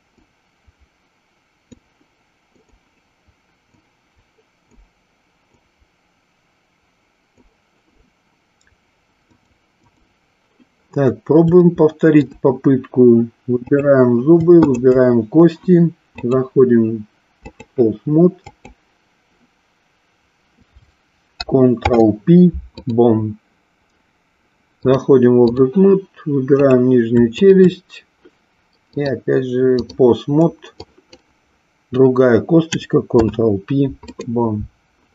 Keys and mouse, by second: 0.3-1.6 drag, 2.6 click, 3.7 click, 5.6-7.4 drag, 9.2 click, 11.6-12.2 shift+middle drag, 13.6 click, 14.7 shift+click, 16.2-17.6 drag, 18.4-19.7 drag, 21.7 ctrl+p, 24.9-25.6 drag, 26.5 click, 27.4 shift+click, 28.9-29.9 drag, 30.8-31.2 drag, 33.0 ctrl+p.